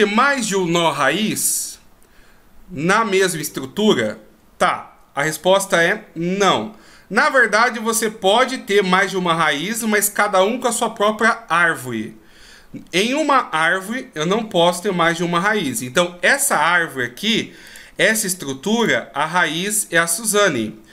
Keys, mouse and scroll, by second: 17.6 click.